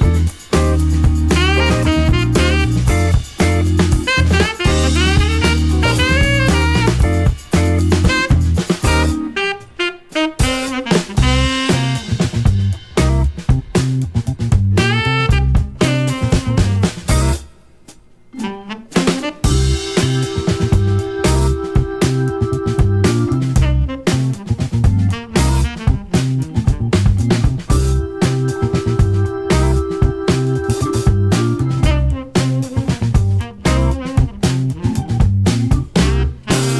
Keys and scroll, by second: 1.7 Down, 2.0 Down, 2.4 Down, 4.6 scroll down 3, 10.4 super+d, 33.0 super+d.